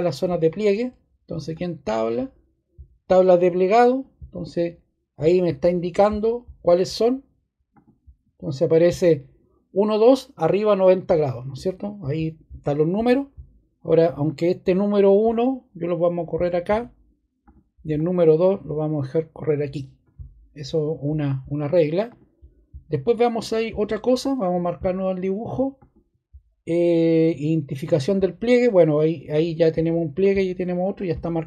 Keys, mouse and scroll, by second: 30.0 click, 30.8 click.